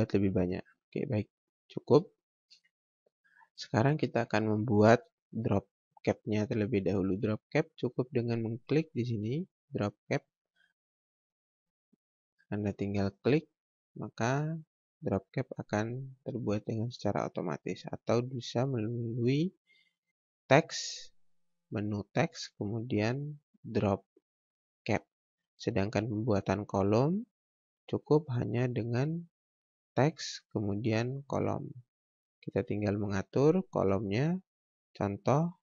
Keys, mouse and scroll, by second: 2.6 ctrl+space, 2.8 click, 13.0 click, 14.5-14.9 scroll up 1, 16.8-17.4 scroll down 1, 17.4-17.9 scroll up 1, 18.8 click, 26.1 click, 26.7-27.0 scroll down 1, 27.2-28.7 scroll up 1, 29.3 click.